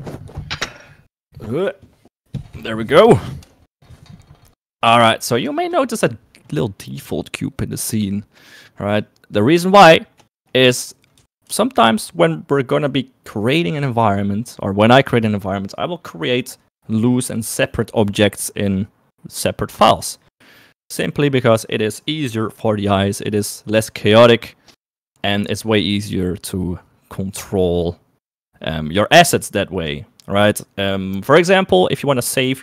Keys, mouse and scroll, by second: 10.1 middle click, 11.5 KP_1, 11.9 KP_3.